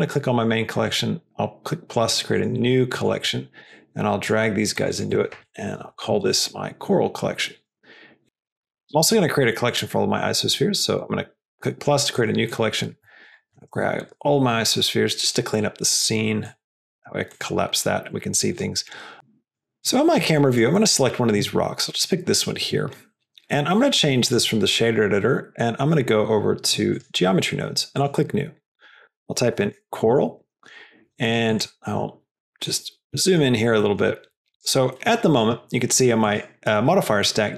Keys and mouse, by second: 0.7 drag, 2.2 click, 3.5-4.2 drag, 4.8-6.9 drag, 7.5 click, 11.0 click, 12.1 click, 12.4 click, 15.4-16.1 drag, 16.4 click, 16.9 click, 17.2 click, 18.5 drag, 19.1 KP_0, 19.4 click, 19.7 click, 20.7 click, 24.2-26.9 drag, 27.9 click, 28.5-30.6 drag, 31.2 drag, 32.4 middle click, 33.1 middle drag, 33.7 middle click, 34.5 drag, 34.9 middle click.